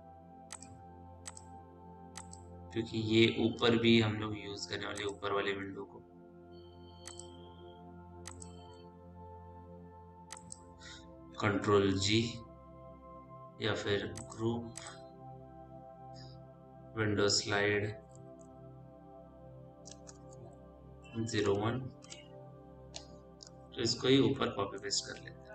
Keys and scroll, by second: 3.8 ctrl+z, 12.4 ctrl+g, 17.5-21.2 typing, 21.9 Return, 24.9 w.